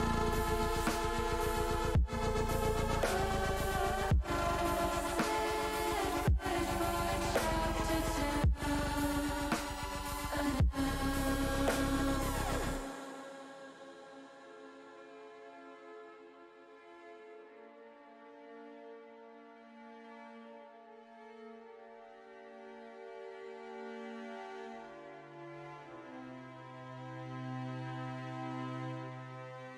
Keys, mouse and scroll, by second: 0.5 shift+click, 3.2 middle click, 4.2 middle click, 5.3 middle click, 5.8 middle click, 7.5 s, 8.1 z, 9.5 click, 9.8 middle click, 11.4-12.5 middle drag, 13.2 ctrl+z, 13.6 middle click, 15.0 middle click, 16.7 s, 17.7 z, 22.0 click, 22.6 middle click, 23.5 s, 23.9 z, 25.4 click, 26.4 middle click, 27.4 middle click, 28.3 middle click, 28.9 middle click.